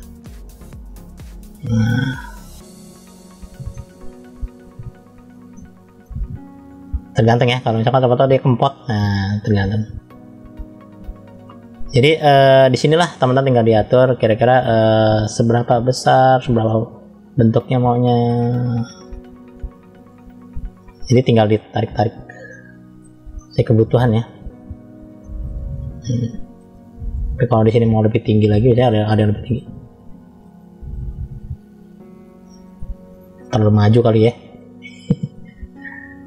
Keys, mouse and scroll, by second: 0.4 click, 1.0 click, 1.9 click, 2.3 click, 3.0 click, 3.5-5.1 middle drag, 5.4 middle click, 6.9 click, 11.1 middle click, 11.9-12.3 scroll up 1, 12.5 middle click, 13.4 click, 15.1 click, 16.2 middle click, 17.2 click, 17.9 click, 18.6 click, 19.5 click, 20.0 click, 20.5 click, 21.0 middle click, 21.8 scroll down 1, 22.3 middle click, 23.3-24.4 middle drag, 25.0 middle click, 25.9 middle click, 27.6 middle click, 28.2-29.3 scroll up 1, 29.4 click, 30.3 click, 30.8 click, 31.4 click, 32.3-33.4 middle drag, 34.0 click, 35.1 click, 36.0 click.